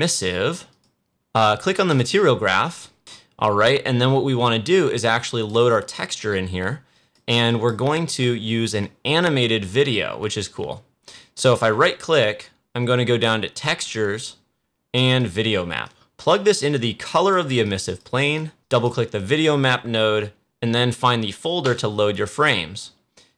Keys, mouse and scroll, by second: 0.6 click, 1.8-4.7 drag, 4.9-6.9 drag, 11.3 right click, 15.1-18.3 drag, 21.6-23.3 drag.